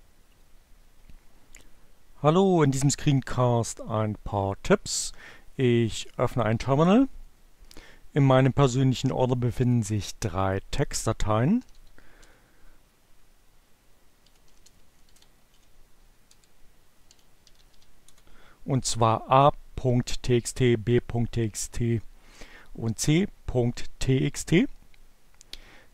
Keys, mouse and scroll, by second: 8.7-10.4 drag, 11.0-11.8 typing, 13.5-15.0 typing, 16.2-18.3 typing.